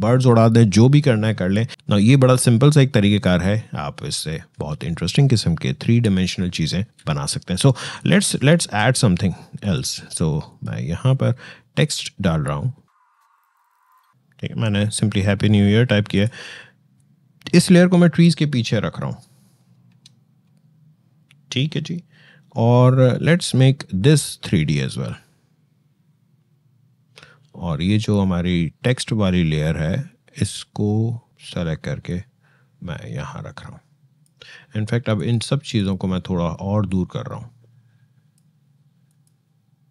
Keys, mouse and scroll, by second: 7.8-9.4 shift+drag, 9.4 shift+right click, 10.3 shift+click, 13.0 shift+click, 13.1-15.6 typing, 15.9-20.7 drag, 24.7 click, 31.3-39.9 drag.